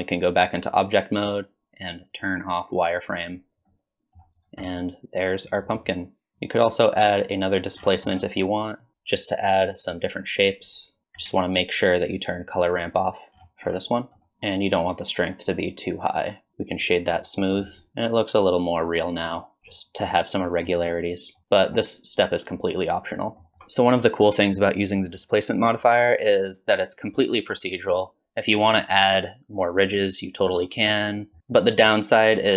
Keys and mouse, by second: 2.1-3.5 drag, 3.7-4.2 middle drag, 4.4 drag, 4.7-6.3 middle drag, 6.6 click, 7.4 click, 9.4 click, 10.9 click, 12.0 shift+click, 13.0 click, 13.7-14.8 shift+drag, 14.8 middle click, 15.2 click, 15.6 middle click, 16.1 shift+click, 17.2 middle click, 17.8-19.3 drag, 19.7-20.1 drag, 20.4 drag, 21.4 click, 21.6 middle click, 22.8-23.3 drag, 23.3 middle click, 23.5 shift+middle click, 26.5-29.9 shift+drag, 29.9 shift+middle click, 31.4 middle click.